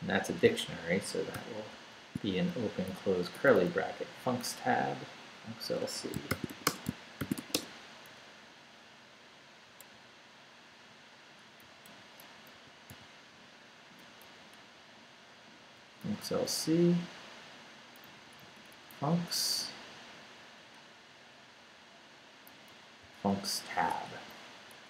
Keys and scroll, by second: 0.0-1.7 typing, 2.5 shift+Left, 3.3 Right, 5.8 Escape, 6.1-7.9 typing, 8.4 Left, 9.9 Right, 11.6 Right, 11.8 Left, 12.5 i, 12.9 n, 14.0 Left, 16.0 Left, 16.5 Right, 18.1 Right, 18.9 Left, 22.5 Left, 23.0 c, 23.9 BackSpace, 24.1 s.